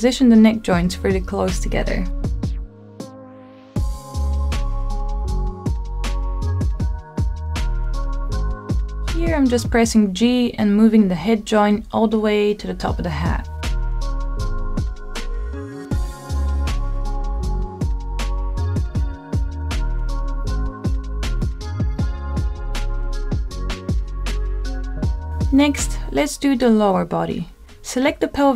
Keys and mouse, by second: 1.2 click, 3.3 g, 3.5 z, 5.3 click, 5.8-7.5 middle drag, 8.8-9.3 middle drag, 10.0 g, 10.8 z, 13.8 click, 14.2 middle click, 16.4 g, 17.2 y, 18.7 click, 19.6 g, 20.2 z, 21.2 click, 21.8 g, 22.1 y, 23.5 click, 23.9-25.2 middle drag, 25.3 shift+middle click, 27.3 middle click, 28.0-28.5 drag.